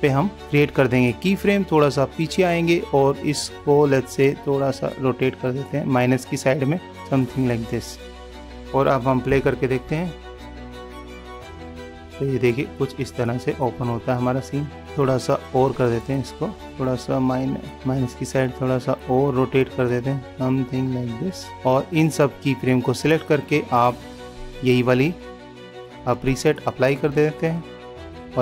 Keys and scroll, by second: 9.8 super+=.